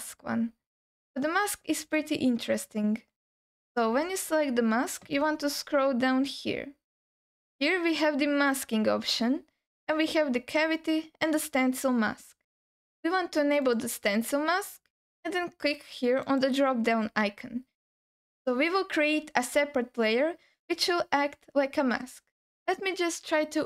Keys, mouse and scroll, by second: 3.1-3.4 scroll down 1, 5.4-6.4 scroll down 4, 6.7-7.4 scroll down 2, 8.5 click, 9.3-10.4 scroll down 1, 10.4-11.4 scroll down 2, 13.7 click, 16.2 click, 17.1-18.2 scroll down 3, 18.2 scroll up 3.